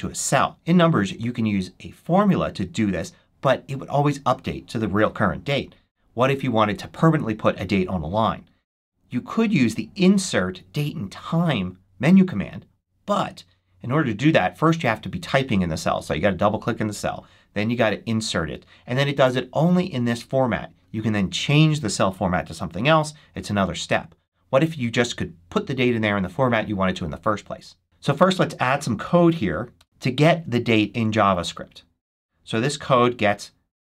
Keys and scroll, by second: 24.7 super+z, 29.7 Return.